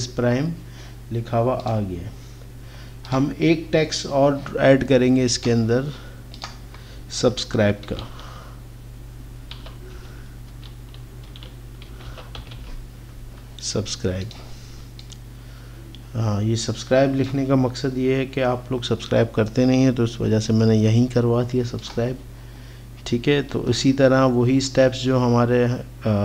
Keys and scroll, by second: 7.9 shift+s, 9.6-12.6 typing.